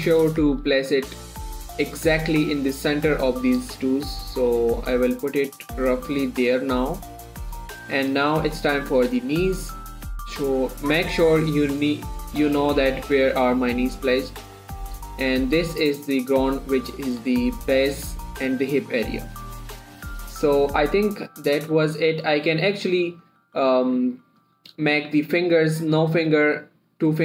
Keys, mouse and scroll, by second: 4.1-12.5 drag, 6.2 typing, 12.7-20.1 drag, 14.3 typing, 22.6 click, 22.6 typing, 24.2-24.9 typing.